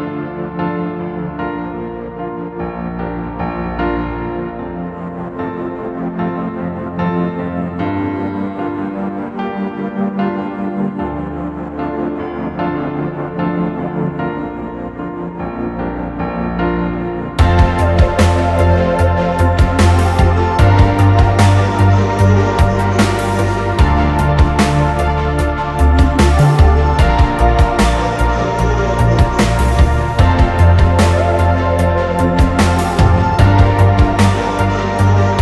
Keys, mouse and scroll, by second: 0.1-0.7 scroll up 2, 0.6 m, 1.3-1.8 scroll down 1, 1.8 middle click, 2.0-2.3 scroll up 1, 2.4 scroll down 1, 4.2 middle click, 5.3 r, 6.2 middle click, 6.8 space, 7.8 m, 9.3-11.4 typing, 13.8-15.0 typing, 15.7 click, 16.1 m, 17.2 6, 18.0 Return, 18.5 m, 19.7-25.1 typing, 26.4-26.8 typing, 28.7-32.2 typing, 33.8 space, 35.2-35.4 typing.